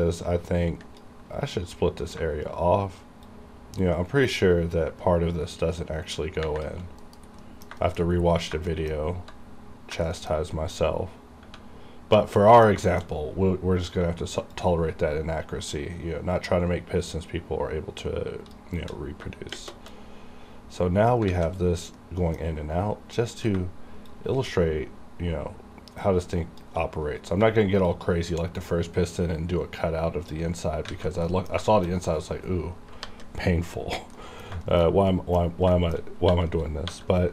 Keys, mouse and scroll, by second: 3.3-7.1 shift+drag, 7.1 KP_Decimal, 7.5 middle click, 7.8 shift+middle click, 8.1 scroll up 1, 8.8 shift+middle click, 9.0 shift+scroll up 2, 9.6 scroll up 1, 10.1 shift+middle click, 10.4-11.4 scroll up 1, 11.7 scroll down 1, 12.4 middle click, 12.9 shift+middle click, 13.1 shift+scroll down 2, 14.6-19.6 shift+drag, 21.3 alt+a, 21.6 scroll down 1, 22.0 middle click, 22.0-24.1 middle drag, 24.1-27.9 shift+drag, 27.9-30.9 shift+drag, 30.9 alt+a, 31.3 middle click, 31.7 middle click, 31.8 shift+middle click, 32.0-32.5 scroll up 2, 32.5-33.1 scroll up 1, 33.1 KP_5, 34.2 middle click, 34.7 shift+middle click, 35.0 scroll down 1, 35.1 middle click, 35.8 shift+middle click, 36.0-36.3 shift+scroll down 1, 36.3 2.